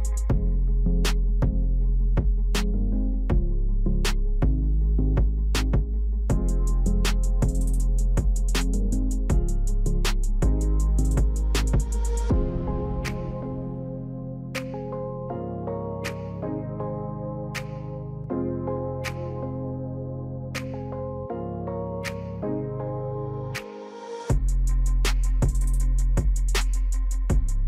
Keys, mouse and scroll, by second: 8.1 alt+click, 9.4 ctrl+click, 10.8-27.6 drag.